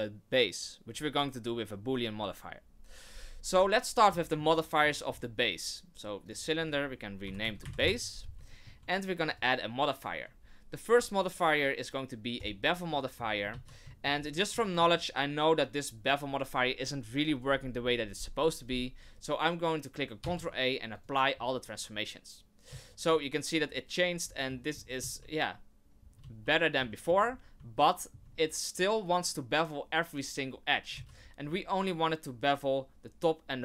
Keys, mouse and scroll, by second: 4.2 shift+middle click, 4.5-4.9 scroll up 2, 4.9 shift+middle click, 5.0 shift+middle click, 6.2 click, 6.4 click, 8.5 shift+middle click, 9.3 click, 13.0 shift+middle click, 13.5 z, 13.9 shift+middle click, 14.2 scroll up 3, 14.6 shift+middle click, 20.2 ctrl+a, 22.6 z, 23.6-24.2 scroll down 2, 24.2 scroll down 2, 24.5 shift+middle click, 25.0 z, 25.9 scroll up 2, 26.2 z, 26.9 shift+middle click, 27.2 scroll up 2, 27.7 shift+middle click, 28.2 shift+scroll up 1, 30.9 z, 31.1-32.0 scroll down 5.